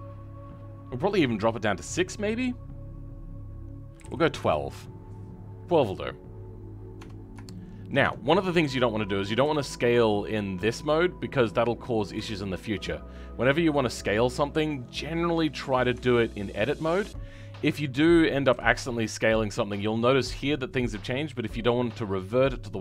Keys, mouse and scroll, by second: 7.5 shift+middle click, 8.0 Tab, 16.9 Tab.